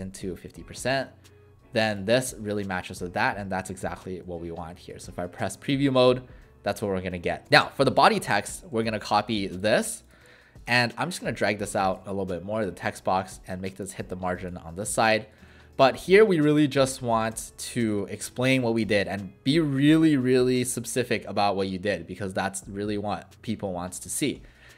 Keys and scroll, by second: 0.1-0.9 typing, 4.3 w, 7.5 w, 15.4 ctrl+a, 17.3 BackSpace.